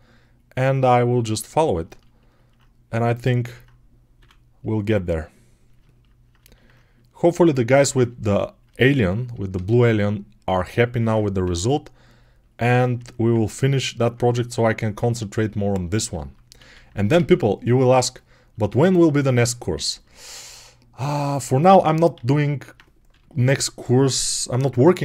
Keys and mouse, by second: 1.8-5.2 ctrl+alt+drag, 4.0 3, 8.0-10.2 ctrl+alt+drag, 10.3-14.2 ctrl+alt+drag, 11.3 g, 14.2-16.7 alt+right drag, 16.5 alt+q, 16.7-20.0 alt+drag, 17.0 alt+q, 22.0 alt+q, 22.9 g.